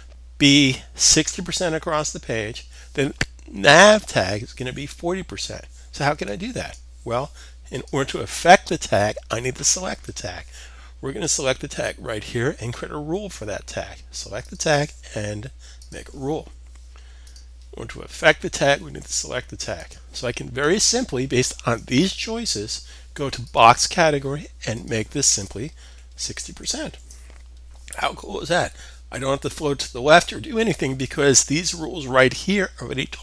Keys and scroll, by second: 25.3-26.5 typing, 28.7-29.2 typing.